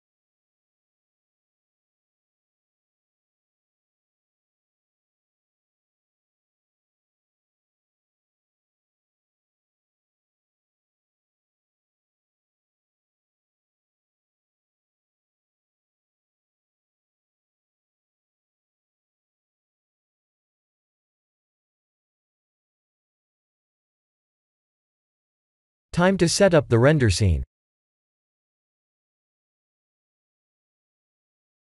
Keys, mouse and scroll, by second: 0.3 click, 1.4 click, 3.9 click, 5.6 shift+middle click, 8.2 click, 9.6 shift+click, 11.0 shift+click, 12.7 shift+click, 14.9 click, 16.3 click, 17.2 click, 18.5 click, 19.5 click, 22.2 click, 24.6 click, 25.8 click, 26.3 middle click, 30.0 click, 30.5 click.